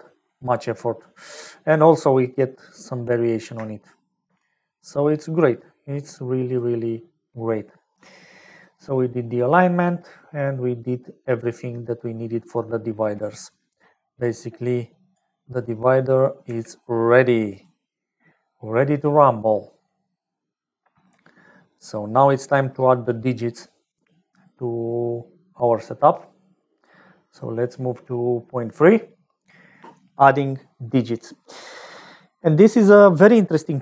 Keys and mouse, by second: 0.4 middle click, 1.8-3.1 middle drag, 3.6 shift+middle click, 5.3 middle click, 6.3 click, 14.5 click, 15.6 click, 16.4 g, 20.2 middle click, 21.7 click, 22.7 middle click.